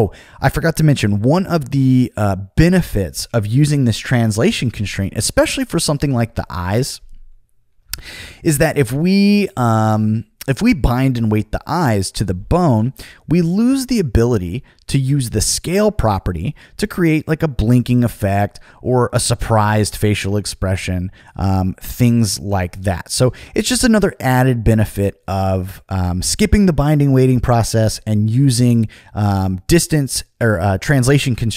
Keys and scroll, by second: 20.1 super+z.